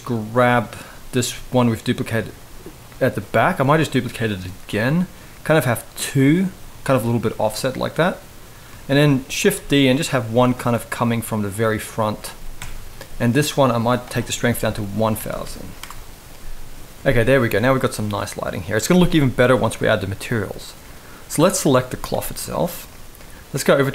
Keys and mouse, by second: 1.0 g, 2.1 r, 3.3 shift+d, 4.3 r, 6.0 g, 8.5 shift+middle drag, 9.1 shift+d, 10.1 r, 12.3 KP_0, 13.7-15.5 drag, 15.0 0, 15.1 0, 17.3 ctrl+s, 21.5 z.